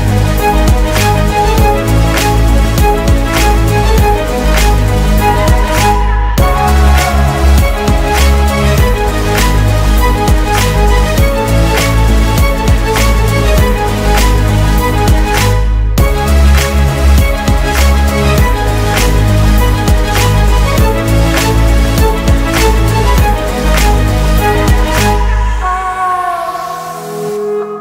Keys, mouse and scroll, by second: 2.0-3.0 typing, 4.2-6.2 typing, 7.2 Return, 9.5-10.5 alt+scroll up 1, 10.5 right click, 15.0-15.4 alt+scroll up 1, 23.2 typing, 23.4 Return, 24.5 alt+scroll down 1, 25.0 space, 27.5 double click.